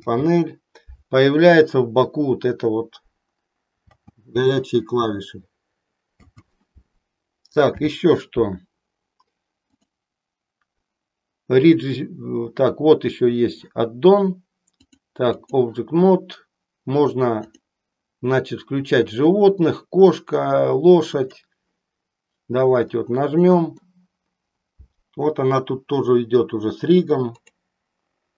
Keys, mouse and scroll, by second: 9.7 click, 14.7 click, 17.5 click, 21.1 click, 22.8 middle click, 27.3 click.